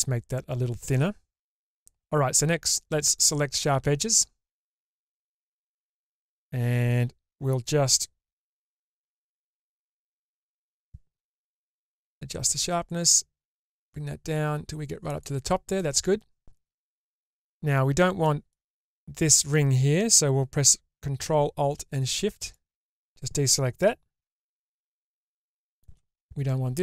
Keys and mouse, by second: 9.5 click, 10.9-15.2 drag, 15.7-17.3 middle drag, 18.2 middle click, 25.3 shift+middle click.